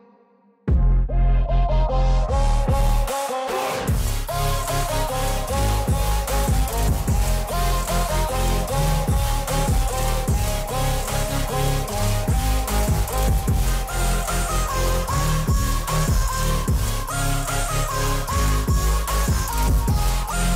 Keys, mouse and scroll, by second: 0.9-3.4 drag, 3.4 space, 3.6 click, 5.7 click, 6.9 scroll down 1, 7.6-8.0 alt+scroll up 1, 8.6 alt+click, 8.8 scroll down 1, 9.9 alt+scroll down 1, 10.8-11.9 drag, 11.9 ctrl+z, 12.8-18.1 drag, 20.2-20.5 drag.